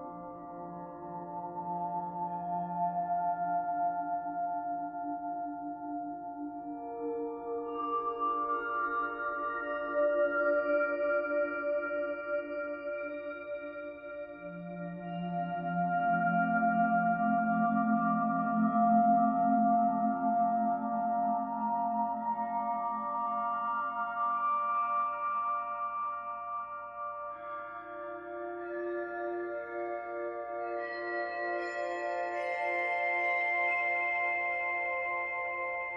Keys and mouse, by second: 0.1 click, 1.3-2.8 alt+drag, 3.3 click, 6.0 ctrl+alt+click, 6.4 alt+shift+drag, 6.8-8.2 ctrl+alt+drag, 8.7-9.6 drag, 9.7 typing, 11.0-11.8 typing, 11.9 Escape, 12.3 click, 13.5 g, 14.3 Escape, 15.7-17.0 drag, 18.0-18.9 drag, 19.3-19.9 drag, 20.0-20.6 drag, 23.0-23.5 drag, 25.7 click, 26.4 click, 27.2 Delete, 29.0-30.0 drag, 30.4-30.7 typing, 32.0-34.5 drag.